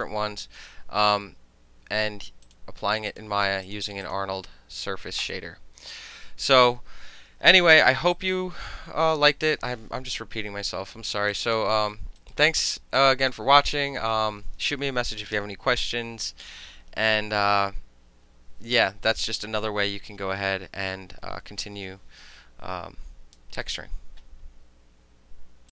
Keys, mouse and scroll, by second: 2.5 click, 3.2 click, 3.7 click, 4.1 click, 5.3 click, 8.2 alt+click, 9.1 alt+middle click, 9.4 alt+click, 9.5-10.9 alt+middle drag, 11.4 alt+click, 11.9 alt+middle click, 12.3 alt+right click, 12.6 alt+middle click, 13.1 alt+click, 13.4 alt+middle click.